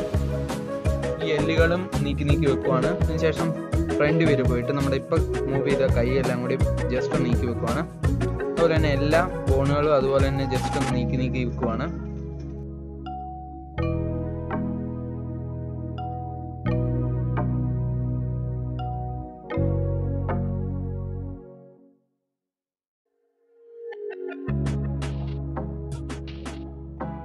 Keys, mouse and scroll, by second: 0.2 scroll up 1, 0.3-2.6 shift+middle drag, 2.6 KP_7, 3.4 click, 3.8 shift+click, 4.2 shift+click, 4.8 g, 6.6 click, 6.8 g, 7.7 click, 7.9 g, 8.7-10.4 middle drag, 10.4 KP_3, 10.9 shift+middle click, 11.2 scroll up 3, 11.5 shift+middle click, 12.5 click, 13.2 g, 14.2 click, 14.6-15.3 scroll down 1, 15.3 shift+middle click, 16.1 click, 16.8 g, 17.6 click, 17.8 g, 19.9 click, 20.1 g, 21.2-22.2 middle drag, 22.2 KP_1, 22.6-23.9 shift+middle drag, 23.9-24.3 scroll up 2, 24.3 click, 25.0 click, 25.8 g, 27.0 g.